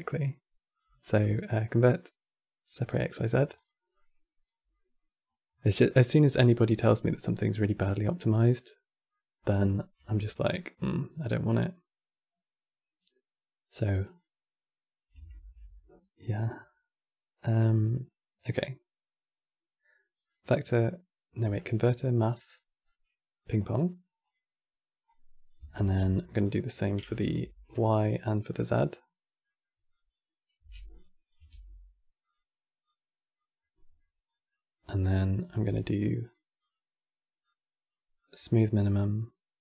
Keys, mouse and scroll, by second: 0.6-3.3 drag, 3.6 click, 4.4 middle click, 5.0-5.3 scroll up 1, 5.3 click, 6.0 middle click, 6.8-8.2 drag, 8.2-9.7 middle drag, 13.7 click, 22.5-25.5 drag, 25.5 ctrl+shift+d, 26.8 ctrl+right click, 27.4 click, 29.1 middle click, 29.6 click, 30.3 g, 31.0 click, 31.2 shift+d, 32.5 click, 33.3-34.0 middle drag, 34.0 scroll down 2, 34.2-35.2 middle drag, 35.2 q, 37.1 click, 37.9-39.6 drag.